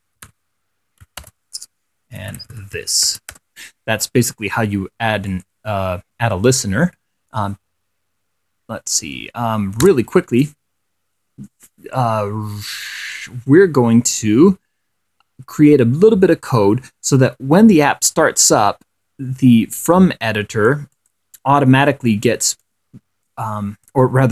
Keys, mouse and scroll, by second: 0.0-3.6 typing, 5.6 scroll up 1, 5.8 click, 10.2 Return, 13.4 scroll up 2, 20.1-21.2 drag, 22.9-24.3 drag.